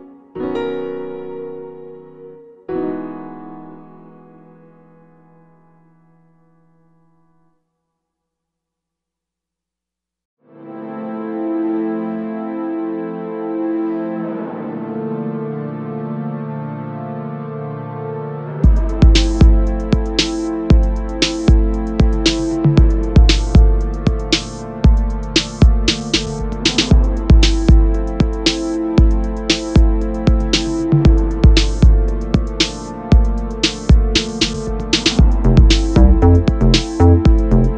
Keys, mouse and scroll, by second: 0.1 click, 0.6 2, 0.8 click, 1.4 g, 2.6 click, 2.7 middle click, 3.2 3, 3.3 click, 3.7 i, 4.5 click, 5.8-10.2 middle drag, 5.8 scroll down 2, 6.3 Tab, 7.0-8.8 scroll up 2, 10.2 shift+s, 10.6 z, 11.9 shift+a, 12.3 Escape, 12.7 middle click, 13.1 shift+a, 15.1 shift+a, 16.7 Tab, 17.7 click, 17.8 middle click, 18.0 s, 18.4 click, 18.5 Tab, 19.4 click, 19.5 Tab, 20.3-21.4 middle drag, 20.9 e, 21.4 click, 21.4 middle click, 21.8 i, 22.2 click, 23.4 e, 23.6 click, 23.7 s, 24.3 click, 24.3 middle click, 24.6 e, 25.3 click, 25.3-27.8 middle drag, 26.0 Tab, 27.8 click, 27.9 middle click, 28.6 shift+right click, 28.8 shift+a, 30.0-32.4 drag, 30.4 KP_Enter, 30.8 Tab, 31.3 scroll down 1, 31.5 scroll up 1, 31.6-32.0 scroll down 1, 32.1 s, 32.4-32.7 scroll up 1, 32.7 s, 33.6 click, 33.7 scroll down 1, 33.9-36.4 middle drag, 35.2 f, 36.4 click, 36.5-37.7 middle drag.